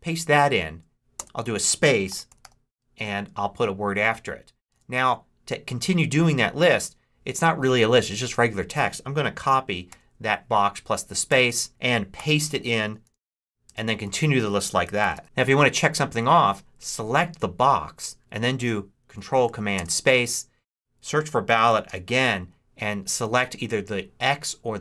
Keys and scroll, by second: 1.1-2.8 typing, 4.6 Return, 9.8 super+c, 11.1 Return, 12.1 super+v, 12.7 shift+super+v, 13.0-15.7 typing, 13.9 super+v, 14.6 shift+super+v, 19.6 ctrl+super+space, 20.9-22.5 typing.